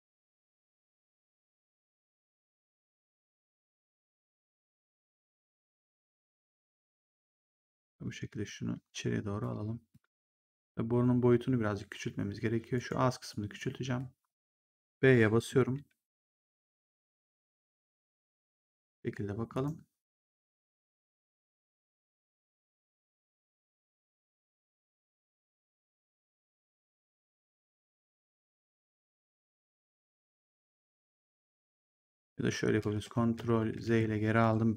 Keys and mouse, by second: 2.5 click, 5.0 click, 6.3 click, 10.3 right click, 12.6 right click, 13.2 click, 13.7 r, 15.4 b, 17.0 click, 19.4 right click, 20.0 click, 20.9 right click, 21.3 click, 23.5 click, 27.6 middle click, 31.3 click, 32.7 ctrl+z.